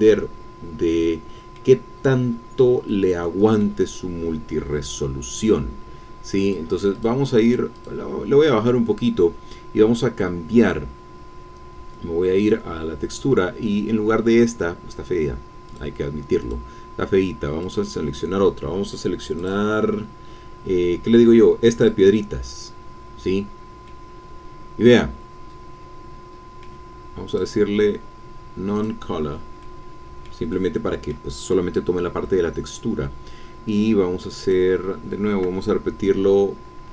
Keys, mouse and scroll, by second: 1.9-2.5 scroll up 1, 2.5-2.9 scroll down 1, 2.9 middle click, 3.2 click, 6.4-7.7 drag, 7.8 click, 12.4 click, 13.4-13.8 scroll up 1, 15.7 click, 16.4 click, 17.6 click, 19.4 click, 19.9-20.3 scroll down 1, 20.3-21.4 scroll up 1, 21.7 click, 23.9-26.9 drag, 26.9 middle click, 27.3 click, 28.7 click, 29.6-31.8 drag, 32.4-33.5 scroll down 1, 34.4 click.